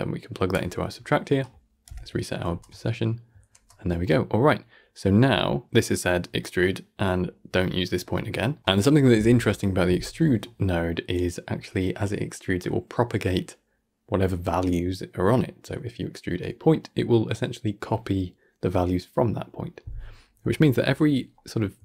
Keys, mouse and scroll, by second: 0.7 scroll down 4, 1.0 middle click, 1.7 shift+Left, 2.6 shift+space, 3.4 shift+space, 3.8-4.7 shift+middle drag, 4.7 scroll up 2, 4.9-9.4 middle drag, 9.4 scroll down 3, 9.6-14.8 shift+middle drag.